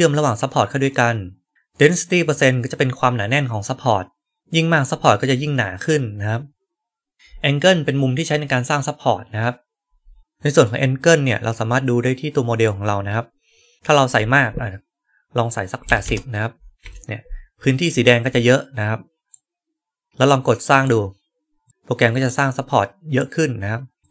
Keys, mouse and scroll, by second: 10.2-12.6 right drag, 19.2-20.1 right drag, 20.6 click, 21.7 right click, 23.1-24.0 right drag, 24.0 click.